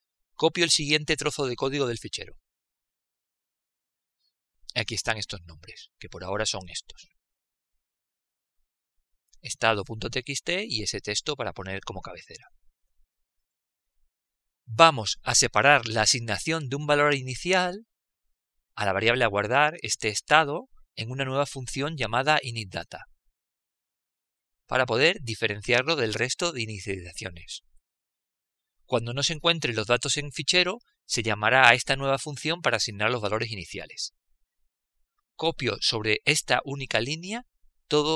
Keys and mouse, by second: 2.5 ctrl+v, 4.0-5.6 middle drag, 6.4-9.9 drag, 19.7-36.6 middle drag.